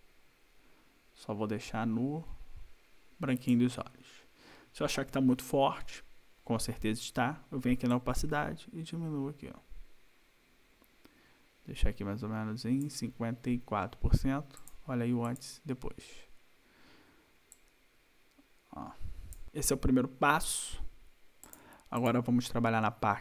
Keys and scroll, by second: 19.4 ctrl+-.